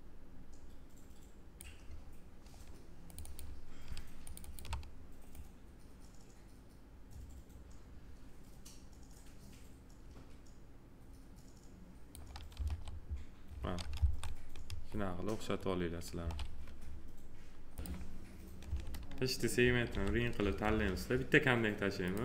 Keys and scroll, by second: 12.6 2, 13.9 F4, 18.6 2, 19.9 alt+r.